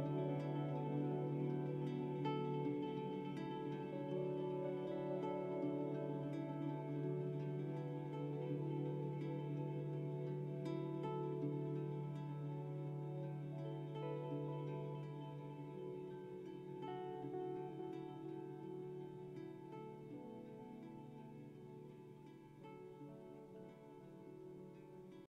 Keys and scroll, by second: 1.1 ctrl+g, 1.3 ctrl+j.